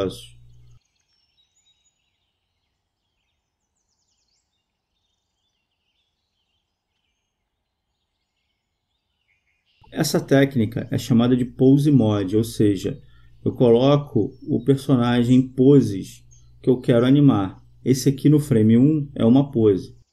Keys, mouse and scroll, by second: 0.3-2.1 right drag, 1.4-3.1 drag, 6.0-7.6 right drag, 8.3-10.0 drag, 11.0-12.6 right drag, 12.3 click, 12.7-14.1 drag, 14.4-15.8 right drag, 15.7 click, 16.1-17.3 drag, 18.4-20.1 drag.